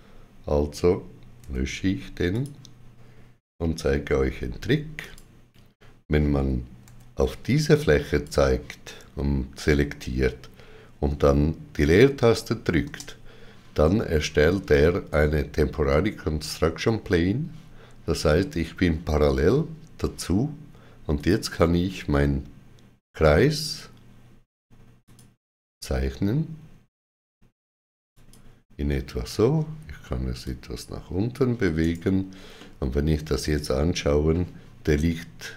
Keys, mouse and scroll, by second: 1.3 2, 2.2 click, 3.8 x, 4.9 click, 4.9 click, 6.7 3, 7.9 click, 12.7 space, 21.0 click, 24.9 click, 28.0 click, 29.1 g, 30.3 click, 31.7 right click, 32.4 middle click.